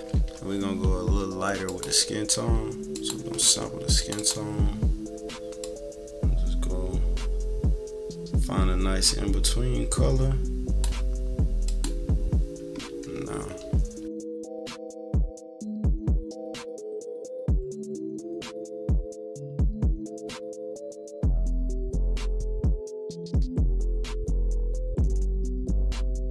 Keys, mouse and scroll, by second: 0.0 =, 0.1 =, 0.5 scroll down 2, 1.6 click, 2.9 click, 3.9 click, 5.6-10.9 drag, 11.6 click, 12.8 =, 13.1-13.4 scroll down 2, 13.1 =, 15.4 -, 15.5 =, 16.1 -, 16.6 click, 17.0 click, 17.1 -, 17.2 =, 17.4 click, 18.0 click, 18.6-19.7 typing, 18.9 click, 19.3 middle click, 19.4 click, 19.7 middle click, 19.8 click, 20.3 click, 20.8 -, 20.9 =, 21.0 click, 22.0 -, 22.1 =, 22.3 click, 23.0 -, 23.1 =, 23.3-24.7 drag, 24.9 =, 25.1 click, 25.6 click, 26.0 click, 26.1 click.